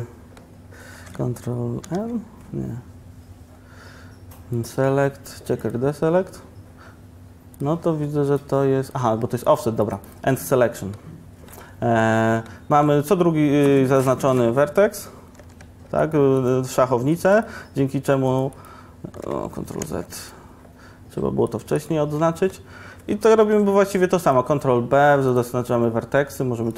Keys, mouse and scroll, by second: 1.9 ctrl+n, 2.1 ctrl+n, 19.6 ctrl+z, 23.5 ctrl+b.